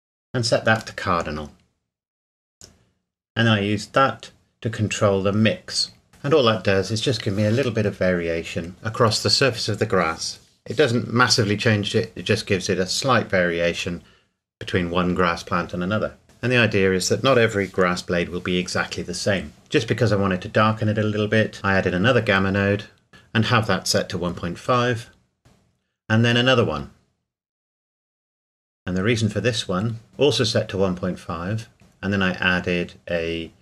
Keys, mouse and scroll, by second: 3.2 click, 6.1 middle click, 9.7-10.1 scroll down 1, 11.6 right click, 12.8 click, 14.5 middle click, 15.1 scroll down 1, 19.0-19.5 scroll up 1, 19.5 click, 19.9-20.3 scroll up 1, 21.1 click, 21.5 shift+d, 23.1 KP_1, 23.1 KP_Decimal, 23.3 KP_5, 23.7 KP_Enter, 25.4 shift+middle click, 25.9 shift+d, 26.8 click, 27.6 shift+d, 28.7 click, 31.7 click.